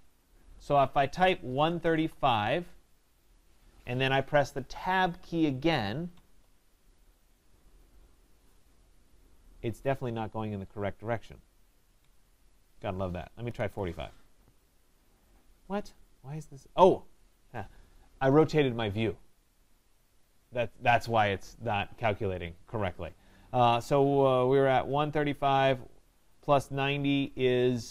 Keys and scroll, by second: 6.1 Tab, 12.0 Tab, 25.0 Tab.